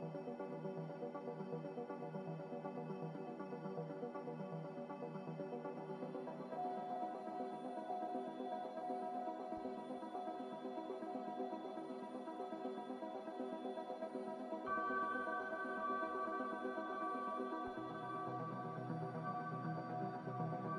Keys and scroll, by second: 4.8 x, 16.8 ctrl+z, 17.1 ctrl+z, 17.5 ctrl+z.